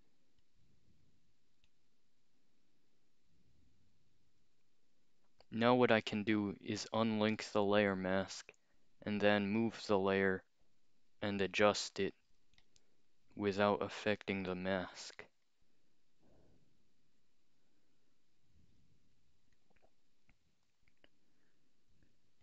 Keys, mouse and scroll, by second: 1.7-4.2 drag, 7.0 click, 8.4 click, 8.8-10.0 scroll up 2, 10.0 click, 12.6-14.9 alt+shift+drag, 15.5-18.8 drag, 19.6 click, 20.9-22.4 alt+shift+drag.